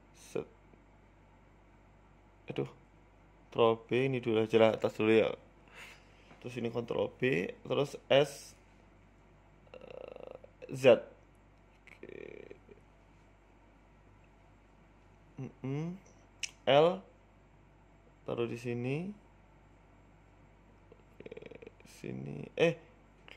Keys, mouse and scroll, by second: 1.1 ctrl+b, 4.0 click, 4.6 ctrl+b, 6.7 click, 7.4 shift+click, 8.0 ctrl+b, 16.4 scroll up 2, 16.4 s, 16.6 shift+middle click, 17.0 Tab, 17.3 Tab, 18.2 l, 18.3 l, 18.8 g, 20.1 middle click, 21.4 KP_1, 21.8 s, 22.5 g.